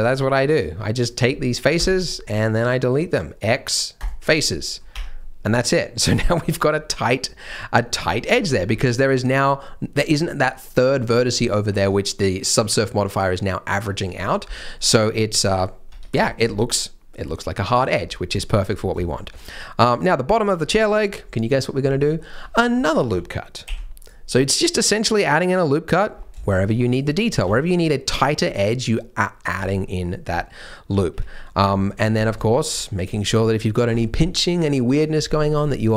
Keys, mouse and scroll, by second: 1.3 middle click, 1.7 x, 4.4 middle click, 4.9 Tab, 5.1 middle click, 8.8 Tab, 8.8 scroll up 1, 14.4 scroll up 1, 14.5 middle click, 16.2 Tab, 16.2 scroll down 2, 16.4 middle click, 17.1 scroll down 1, 18.3 shift+middle click, 18.8 scroll up 1, 19.0 shift+middle click, 19.5 middle click, 19.8 scroll up 1, 20.1 middle click, 20.4 Tab, 20.6 middle click, 20.9-22.0 scroll down 1, 22.1 shift+middle click, 22.6 scroll up 1, 23.6 ctrl+r, 26.1 scroll up 1, 26.4 shift+m, 27.3 g, 28.8 middle click, 29.5 Tab, 29.8 middle click, 30.3-30.6 scroll up 1, 30.6 middle click, 30.9 scroll up 1, 31.1 Tab, 31.4-32.2 scroll down 2, 31.7 middle click, 32.4 shift+middle click, 33.2 scroll up 1.